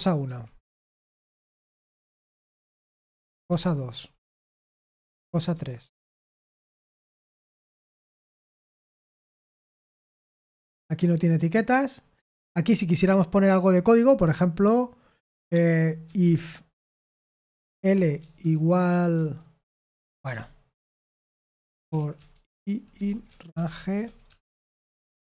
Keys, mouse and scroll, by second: 4.4-7.6 typing, 20.3 BackSpace, 20.7 BackSpace, 23.0-25.1 typing.